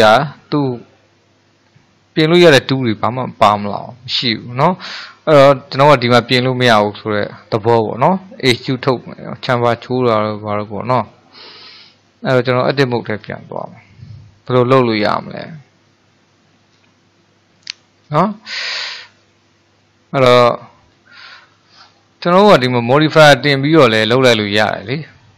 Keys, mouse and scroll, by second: 12.8 Tab, 14.7-20.9 middle drag, 22.5 click.